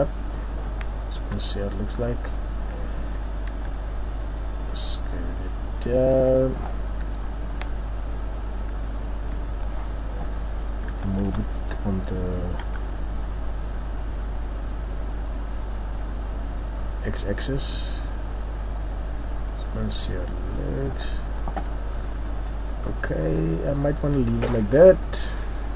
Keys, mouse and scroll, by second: 0.8-2.1 scroll down 8, 2.1-2.8 scroll up 4, 2.8 Tab, 3.5 s, 7.0 Tab, 7.0 click, 8.9-9.7 scroll down 2, 11.0 g, 21.1 Tab, 21.1 click, 21.6-22.0 scroll down 1, 22.3 middle click, 22.8 scroll down 3, 23.3 middle click, 23.9 middle click, 24.1 scroll.